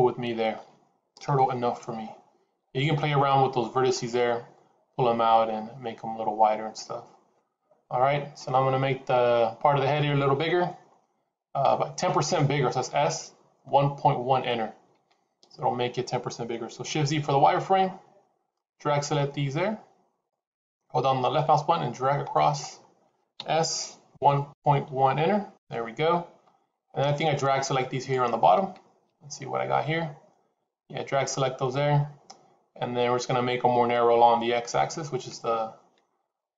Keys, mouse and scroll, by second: 1.1 KP_3, 17.6 shift+z, 18.4 click, 21.2 click, 23.2 s, 27.3 click.